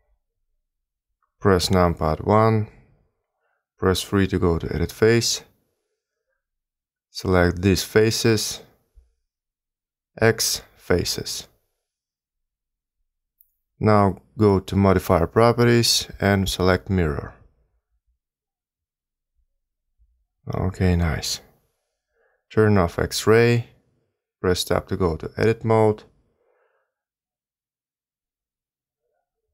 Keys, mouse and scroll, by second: 1.4 KP_1, 2.8 3, 5.0 a, 5.1 a, 6.7 b, 10.6 x, 13.9 Tab, 15.2 click, 16.4 click, 19.0-19.7 scroll up 2, 20.1 middle click, 21.1-21.6 scroll down 2, 24.0 click, 25.8 Tab, 28.4 click, 28.6 shift+click.